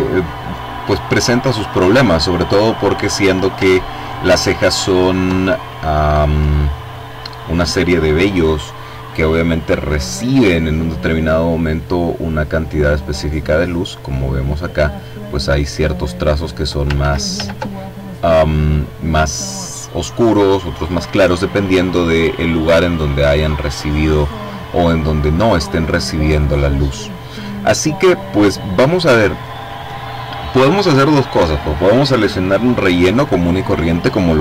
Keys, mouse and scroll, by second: 3.7-4.2 ctrl+scroll up 2, 4.4-4.9 ctrl+scroll up 2, 5.5-6.0 scroll down 2, 11.7-12.8 drag, 12.9-14.2 drag, 15.3-16.6 drag, 16.7 ctrl+click, 16.8 ctrl+z, 18.4-19.6 drag.